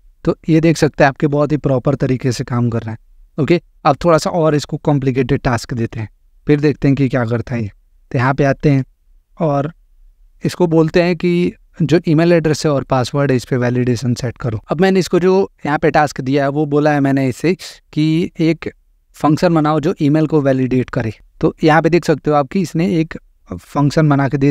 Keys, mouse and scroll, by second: 3.9 click, 5.9 click, 7.6 click, 8.8 click, 10.4 click.